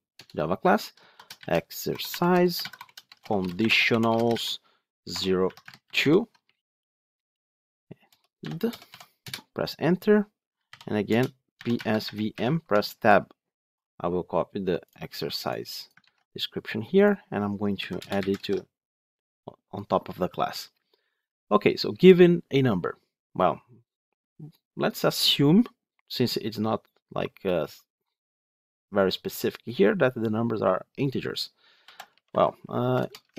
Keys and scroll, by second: 12.6 Tab, 18.3 ctrl+v.